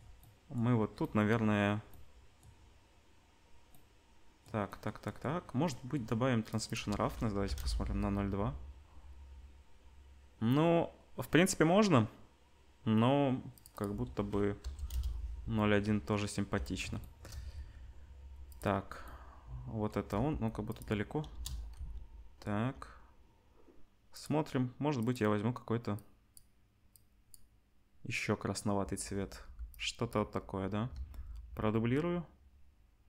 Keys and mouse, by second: 6.5-18.6 drag, 17.5 z, 18.6-21.3 middle drag, 20.2 g, 21.3 KP_0, 21.7-22.7 middle drag, 21.7 z, 29.4 ctrl+b, 30.9 shift+d.